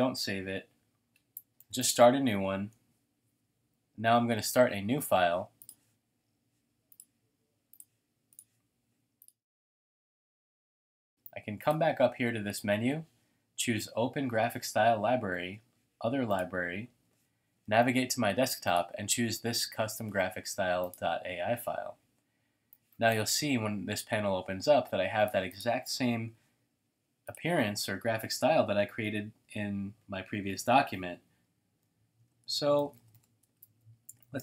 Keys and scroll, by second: 15.2 super+d, 23.9 t, 29.7-32.1 typing, 31.8 shift+super+a.